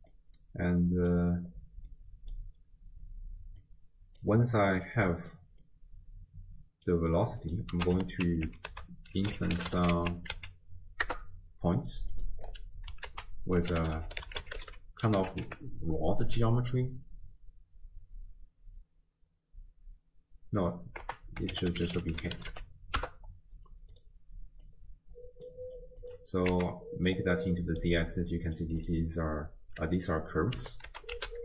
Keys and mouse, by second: 0.1-1.6 middle drag, 1.9 middle click, 3.6 click, 4.8 click, 5.7-6.9 middle drag, 7.4 click, 8.3 ctrl+x, 8.7 ctrl+a, 13.1 ctrl+a, 24.7-25.5 drag, 26.0 click, 27.6-27.9 middle drag, 28.5 middle click, 28.8 click, 30.9 ctrl+a.